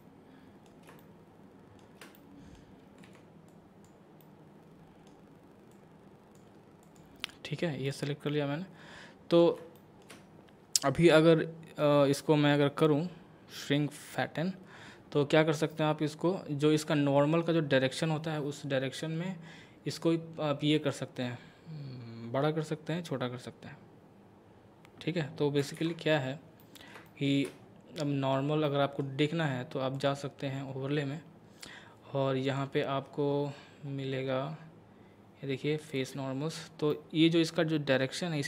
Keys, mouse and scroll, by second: 0.0-3.0 middle drag, 3.0 c, 3.5 click, 4.2-5.7 middle drag, 5.7 click, 7.9 right click, 8.3-9.8 middle drag, 9.8 shift+middle click, 12.6-16.5 drag, 16.8-20.5 middle drag, 20.9-25.8 drag, 25.8 ctrl+z, 26.0-26.6 scroll up 2, 26.6 middle click, 28.6-30.0 middle drag, 30.0 click, 32.5 click, 33.0 scroll down 1, 33.5 scroll down 1, 36.0 click, 36.9-38.4 middle drag.